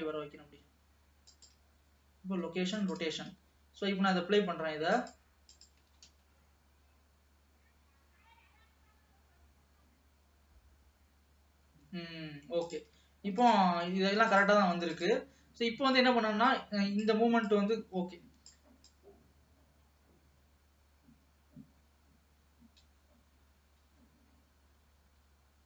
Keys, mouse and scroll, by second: 4.1-5.2 scroll down 3, 5.2 click, 6.0 alt+a, 6.4 space, 11.8 space, 12.9 click, 13.6 shift+click, 14.4 shift+click, 15.1 shift+click, 16.6-22.1 drag.